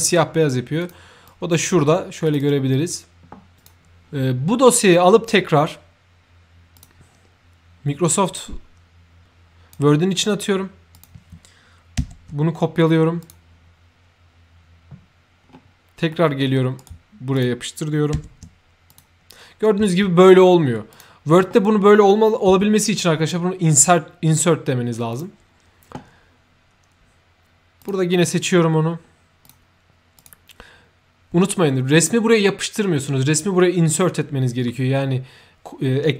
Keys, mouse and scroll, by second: 0.7 click, 1.2 click, 2.1 click, 2.3 click, 3.5 click, 6.7 click, 8.3-9.7 drag, 10.9 click, 12.1 ctrl+c, 13.1 click, 13.3 c, 15.3 scroll up 1, 16.7 right click, 17.0 ctrl+c, 17.2 middle click, 17.3 ctrl+click, 18.1 ctrl+v, 18.8 click, 20.8 ctrl+click, 23.6 ctrl+click, 25.0 ctrl+click, 27.7 ctrl+click, 28.8 ctrl+middle click, 29.3 ctrl+click, 30.1 ctrl+click.